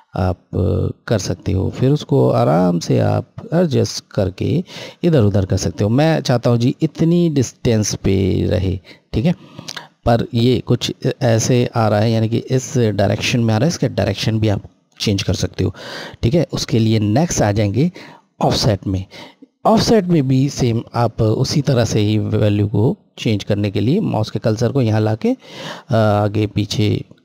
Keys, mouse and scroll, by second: 6.3-7.2 scroll up 1, 7.2-8.3 scroll, 9.0 scroll down 1, 9.2-10.9 scroll, 21.4 scroll down 1, 21.4 click.